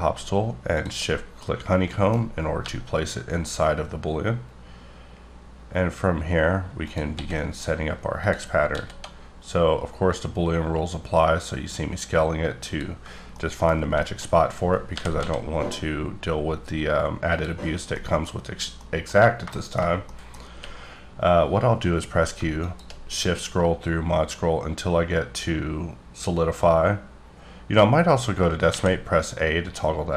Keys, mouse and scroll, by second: 1.3 middle click, 2.2 scroll down 2, 2.5 g, 6.8 click, 7.1 s, 8.2 click, 8.7 s, 12.6 click, 13.3 middle click, 14.2-14.9 scroll up 4, 14.9 g, 15.2 z, 17.3 click, 17.6-17.9 scroll down 3, 17.9 middle click, 18.7 middle click, 20.4 scroll up 1, 20.5 q, 22.6 shift+click, 23.2-24.2 scroll up 2, 24.2-25.8 scroll up 2, 25.8 scroll up 1, 27.5-28.7 scroll down 1, 28.7 a, 29.7-30.1 scroll up 1.